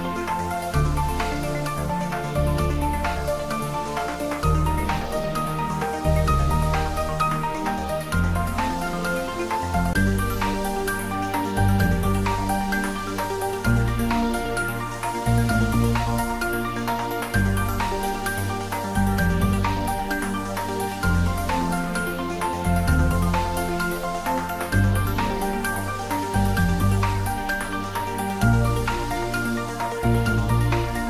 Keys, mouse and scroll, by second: 1.2-1.6 scroll down 1, 1.6-4.0 middle drag, 4.0 click, 6.1 click, 11.5-12.1 scroll down 1, 12.2-12.6 scroll up 1, 15.4 click, 19.0-20.6 scroll down 1, 20.6 scroll up 1, 24.0-25.9 scroll up 1, 26.6 shift+d, 27.7 y.